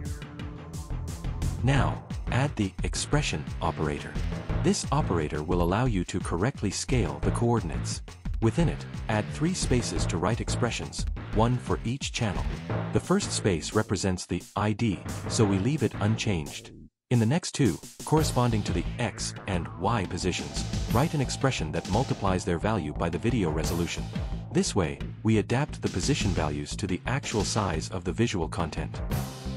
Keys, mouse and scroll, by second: 0.0 click, 0.1 click, 0.6 click, 2.7 right click, 4.9 e, 5.5 p, 6.8 click, 7.9 click, 8.8 click, 9.8 click, 11.0 click, 13.5 click, 14.0 click, 16.5-18.9 typing, 19.2 Left, 20.0-23.7 typing, 20.7 Left, 24.0 Right, 24.7-26.7 typing, 27.7 click, 28.4 click, 29.2 ctrl+c.